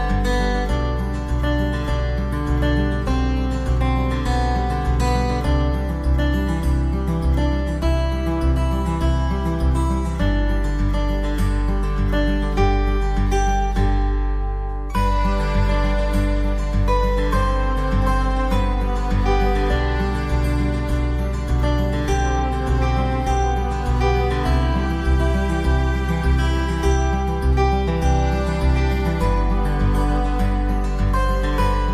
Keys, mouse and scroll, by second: 0.8 click, 1.9 click, 6.1 click, 7.9 click, 9.7 click, 11.4 click, 13.0 click, 19.7 click, 23.0 click, 27.0 click, 28.9 click, 31.1 click.